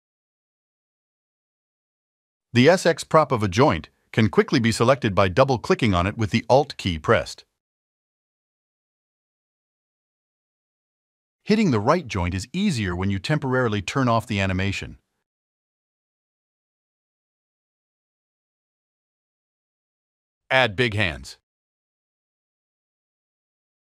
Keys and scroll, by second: 18.0 alt+1.